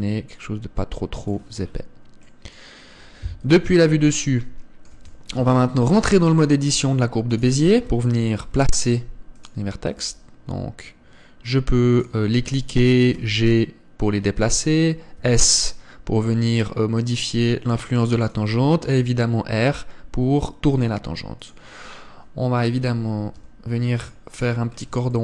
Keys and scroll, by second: 4.0 KP_7, 5.6 Tab.